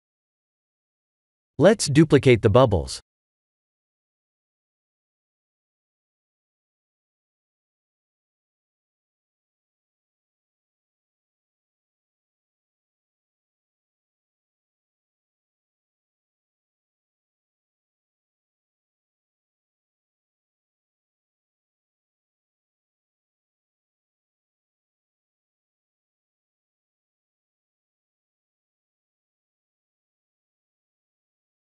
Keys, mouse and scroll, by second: 0.8 shift+d, 2.1 click, 2.7 shift+d, 4.2 shift+d, 6.0 s, 6.7 shift+d, 8.4 s, 9.4 shift+d, 10.6 shift+d, 12.9 shift+d, 13.8 shift+d, 14.7 s, 15.5 shift+d, 16.7 shift+d, 22.7 middle click, 27.6 click, 29.8 click, 31.2 click.